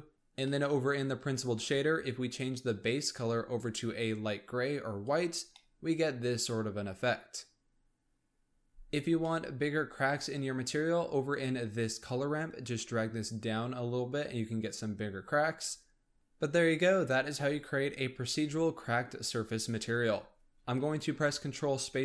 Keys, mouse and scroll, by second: 0.1-2.5 middle drag, 2.5 click, 5.3 scroll down 1, 5.5-9.1 middle drag, 9.2-10.6 middle drag, 10.6-10.9 scroll down 1, 10.9-12.5 scroll up 1, 12.5 click, 16.2 ctrl+space.